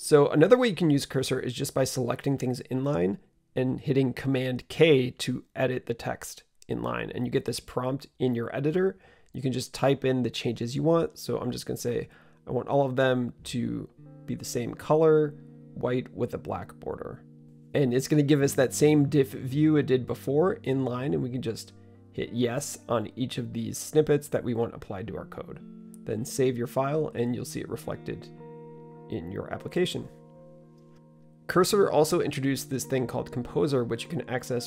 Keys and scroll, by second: 6.3 super+k, 10.2-17.8 typing, 19.7 typing, 26.4 typing, 27.7 super+s.